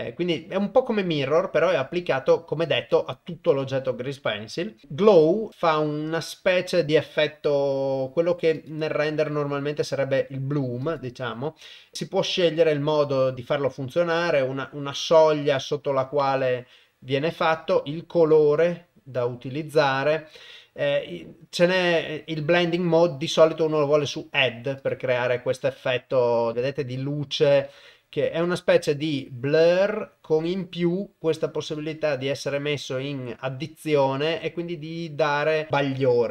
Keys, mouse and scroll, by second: 2.8 click, 3.5 click, 8.6 click, 10.9 click, 12.5 click, 14.2-17.5 drag, 18.3 click, 21.7-23.6 drag, 24.8 click, 31.6 click.